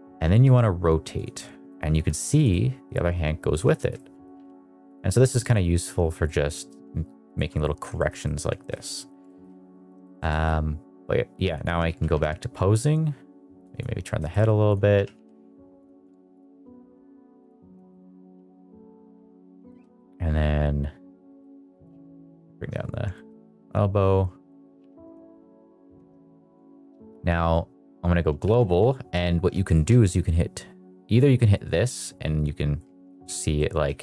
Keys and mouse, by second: 0.3 r, 1.1 click, 1.2-1.6 middle drag, 1.8 r, 2.4 middle click, 3.6 shift+r, 3.6 shift+middle click, 3.8 middle click, 4.3 g, 4.8 click, 5.1 r, 5.7 middle click, 6.1 middle click, 6.6 r, 7.2 click, 7.5 middle drag, 7.9 middle drag, 8.1 middle click, 8.5 shift+middle click, 8.7 middle click, 9.1 shift+middle click, 9.9 shift+middle click, 10.2 middle click, 11.7 r, 12.0 y, 13.9 middle drag, 14.2 shift+middle click, 14.6 click, 14.9 r, 15.1 y, 15.7 click, 16.5 r, 16.7 y, 17.8 shift+middle click, 18.0 middle click, 18.2 r, 19.1 r, 19.3 click, 19.6 shift+middle drag, 19.9 middle drag, 21.2 middle click, 21.8 g, 22.8 click, 23.0 shift+middle click, 24.4 middle click, 24.7 g, 25.1 shift+z, 25.9 Escape, 26.6-27.9 drag, 28.4 g, 29.8 Escape, 31.5 click, 31.6 click, 33.1 ctrl+z, 33.5 middle drag, 33.9 middle drag.